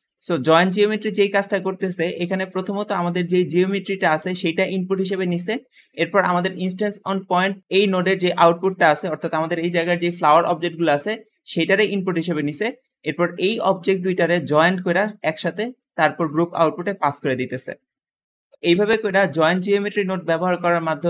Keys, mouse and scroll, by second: 0.0 click, 0.2 g, 0.6 click, 1.0 middle click, 1.3-1.7 scroll down 1, 1.6-2.4 typing, 3.6-5.1 drag, 5.9-7.9 drag, 8.3 click, 11.5-11.9 drag, 11.5 g, 12.1-12.4 drag, 13.2-14.4 drag, 14.8-15.5 drag, 15.8-16.4 drag, 18.2 g, 18.5 Escape, 18.6 click, 19.0-19.8 scroll down 1, 19.3 g, 20.4 middle click, 20.8 scroll up 1.